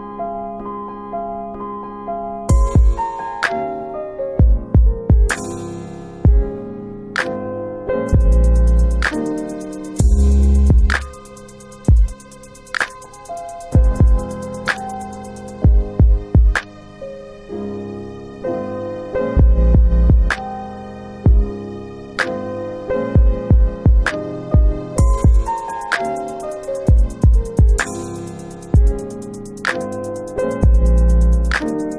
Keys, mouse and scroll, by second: 0.1 click, 1.3 click, 3.1 alt+click, 3.6 alt+click, 4.0 alt+click, 4.5 alt+click, 4.5 alt+right click, 6.9 alt+click, 7.4 alt+middle click, 7.5 alt+middle click, 7.7 alt+right click, 8.0 alt+right click, 9.5 click, 10.8 alt+middle click, 11.1 alt+middle click, 19.0 click, 22.0 click, 27.0 click.